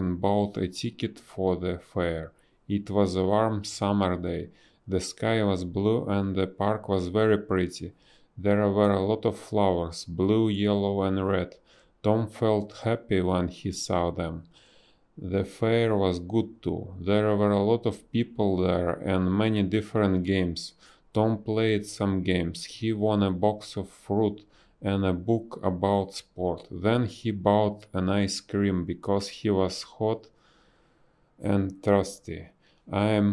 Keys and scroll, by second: 0.0-1.3 typing, 4.2 a, 5.1 b, 5.8 BackSpace, 6.3 b, 9.8 ctrl+z, 10.4 ctrl+z, 16.6 space, 18.9 space, 22.1 ctrl+z, 23.7 ctrl+z, 25.5 space, 27.2 a, 29.4 space, 30.4 b, 32.5 a.